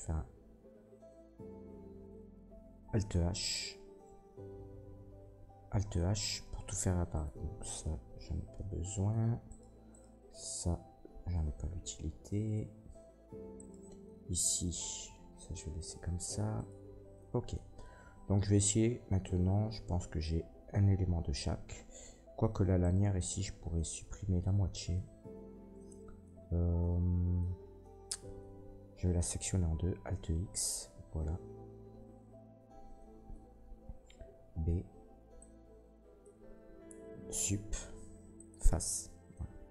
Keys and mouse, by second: 3.8 alt+h, 4.9 Tab, 6.0 alt+h, 7.1 middle click, 7.1 right click, 8.1 Delete, 9.5 middle click, 9.5 right click, 9.9 middle click, 9.9 right click, 10.0-11.5 drag, 10.0-11.5 right drag, 10.7 Delete, 11.5-13.6 middle drag, 13.6-30.9 drag, 16.5 middle click, 16.5 right click, 22.8 middle click, 22.8 right click, 23.2 Tab, 29.7 alt+x, 34.3 b, 35.0-39.7 drag, 37.2 Delete.